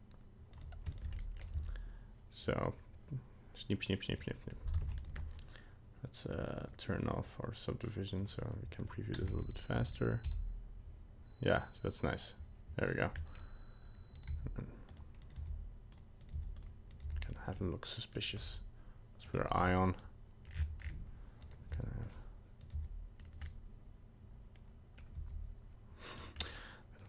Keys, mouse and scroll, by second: 1.0 shift+right click, 1.2 middle click, 1.6 s, 4.8 ctrl+Tab, 5.0 right click, 6.2 click, 6.6 click, 8.2 click, 8.8 right click, 9.3 ctrl+Tab, 9.5 right click, 9.8 shift+right click, 10.2 s, 13.2 middle click, 13.4 middle click, 14.2 right click, 14.3 g, 15.2 right click, 15.5 g, 16.2 right click, 16.3 g, 16.9 right click, 17.0 g, 17.6 middle click, 19.4 click, 19.8 middle click, 20.5 scroll down 6, 20.8-21.2 scroll up 4, 21.4 right click, 21.7 g, 22.6 right click, 22.7 g, 23.4 middle click, 25.1 g, 26.6 middle click.